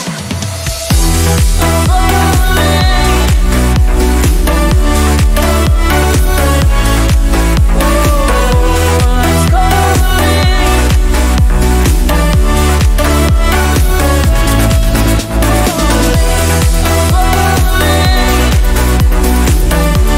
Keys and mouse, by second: 2.0-14.6 drag, 14.6-16.3 middle drag, 16.3 click, 16.6-18.4 shift+middle drag, 18.4-20.1 drag.